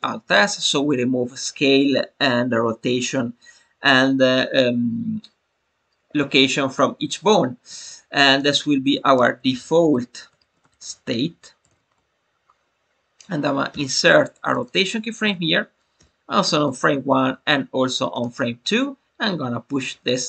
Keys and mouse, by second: 8.2-12.6 drag, 15.1 Right, 15.9 i, 17.1 Right, 17.4 i.